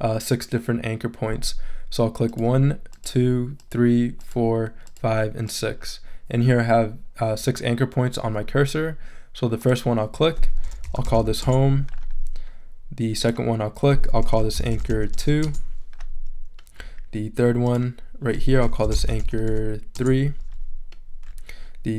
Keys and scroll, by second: 10.6-11.6 typing, 14.2-15.6 typing, 18.4-20.0 typing.